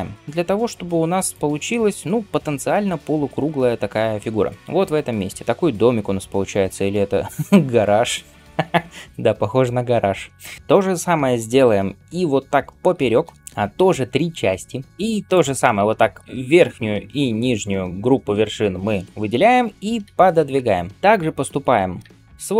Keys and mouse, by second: 8.3-15.0 middle drag, 12.8 ctrl+r, 16.0 ctrl+click, 19.9 g, 21.9 ctrl+middle click, 22.3 ctrl+click, 22.4-22.5 middle drag.